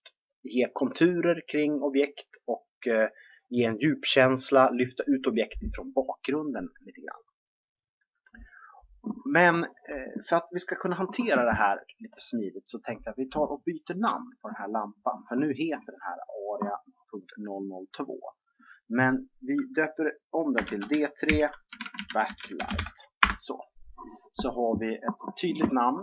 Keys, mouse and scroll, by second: 17.4-20.2 drag.